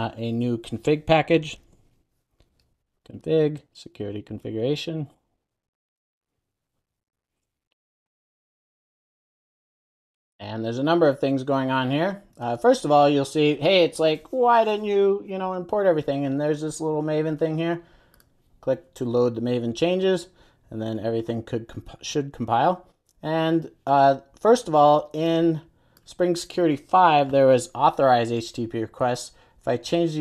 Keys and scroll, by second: 1.7 super+n, 7.2 super+a, 9.5 Return, 10.1 super+s, 18.4 shift+super+i.